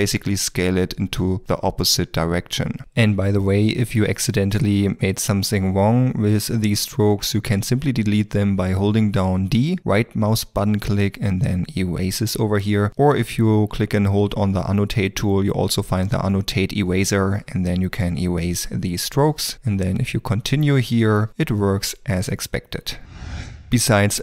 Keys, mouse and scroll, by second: 3.2 d, 3.8 click, 4.9 d, 5.3 click, 10.6 d, 11.8 right click, 20.2 d, 20.6 l, 21.4 d, 22.4 d.